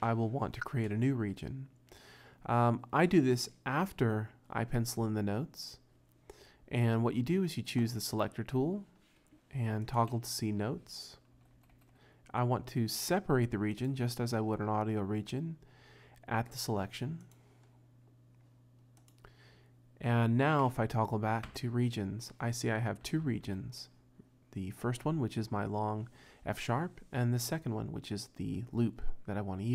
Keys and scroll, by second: 10.1 -, 11.3 t, 11.6 t, 11.7 t, 21.5 -, 23.1 r, 23.3 r, 23.5 r.